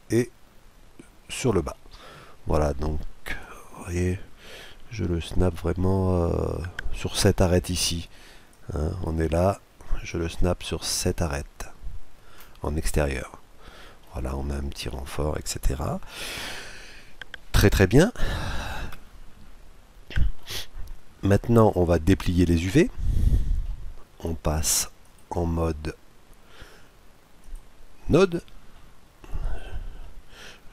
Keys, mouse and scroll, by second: 0.2-1.8 drag, 1.7-3.3 middle drag, 3.3 KP_Decimal, 3.9-5.8 middle drag, 8.5-11.7 drag, 13.1-14.8 middle drag, 15.0-16.7 middle drag, 16.7-17.3 scroll down 1, 17.3-19.1 middle drag, 21.7-24.9 middle drag, 25.0-26.7 drag, 26.8 click, 28.7-30.7 middle drag.